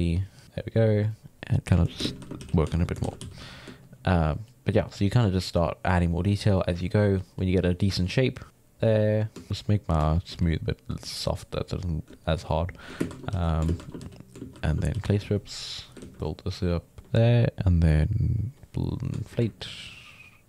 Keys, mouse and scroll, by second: 0.4 click, 0.7-2.0 middle drag, 2.0 shift+space, 2.3 f, 2.7 ctrl+middle click, 3.0 shift+c, 3.2 f, 3.8-9.0 ctrl+drag, 9.0 middle click, 9.5 shift+f, 10.2 shift+f, 10.9-12.2 drag, 12.2 shift+middle click, 13.0-14.9 typing, 15.3 click, 16.0 ctrl+z, 16.2-18.3 drag, 18.4 click, 18.7 middle click, 19.6 ctrl+click.